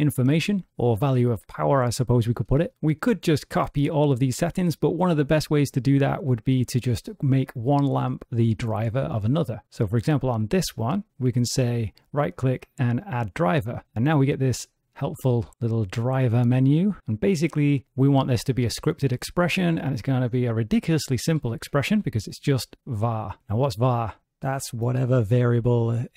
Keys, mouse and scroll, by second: 10.2 click, 11.6 right click.